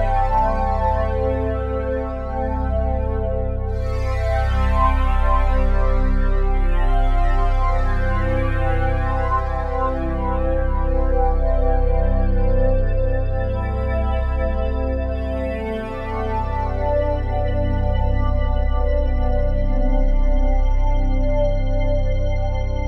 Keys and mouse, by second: 5.4 click, 5.5 typing, 7.0 0, 8.0 click, 8.6-10.5 drag, 10.8-12.1 drag, 13.1-14.3 shift+drag, 14.2 typing, 15.6 typing, 16.3 click, 17.2-18.0 typing, 20.2 ctrl+s.